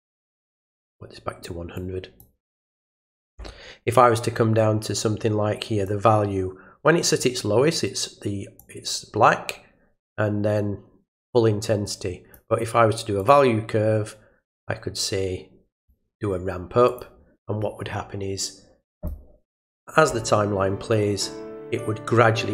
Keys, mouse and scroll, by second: 1.8 click, 5.8-7.2 drag, 8.6-12.3 drag, 13.2 click, 15.8 click, 16.9 click, 18.9 click.